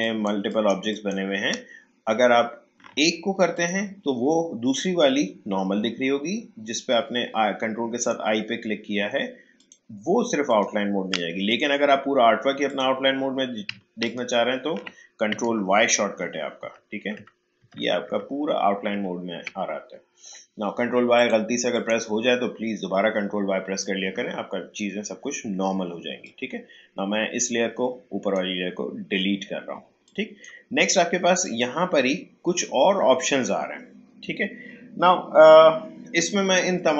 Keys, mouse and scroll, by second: 8.0 ctrl+click, 16.0 ctrl+y, 21.1-29.8 drag, 29.8 space, 30.0 click, 30.3 space, 31.4 click.